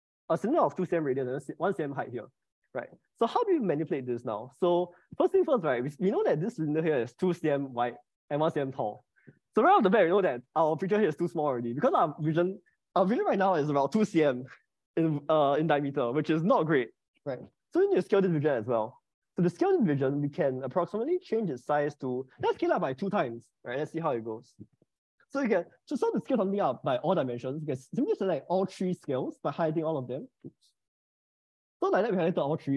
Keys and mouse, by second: 3.3 middle click, 10.9 click, 19.5 click, 23.8 click, 24.7 ctrl+z, 29.0-30.1 drag, 30.8 ctrl+z, 31.5-32.7 drag.